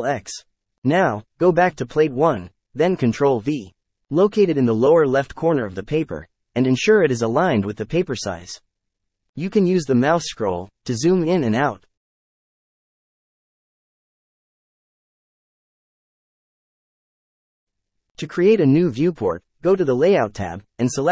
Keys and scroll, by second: 3.0 ctrl+v.